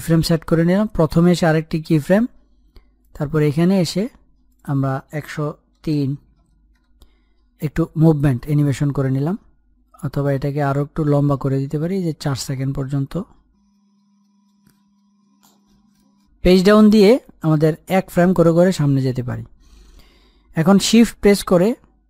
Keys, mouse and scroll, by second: 0.0-3.0 drag, 11.0 click, 11.4 Page_Up, 12.1-15.5 drag, 17.4 Page_Down.